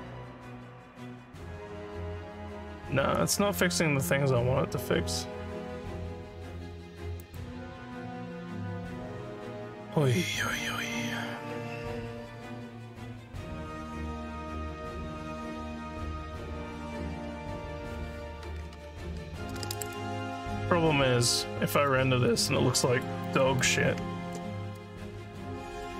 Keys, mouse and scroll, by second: 3.2 right click, 7.2 click, 20.4-21.9 alt+drag, 22.3 alt+click, 22.8 alt+middle click, 23.3 alt+click, 24.2 ctrl+s.